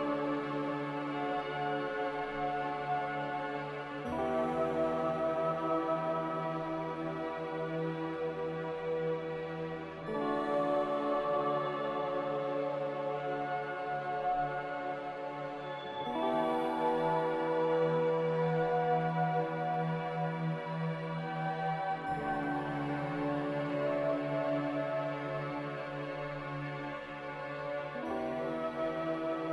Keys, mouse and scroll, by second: 1.6 Delete, 23.7 Delete.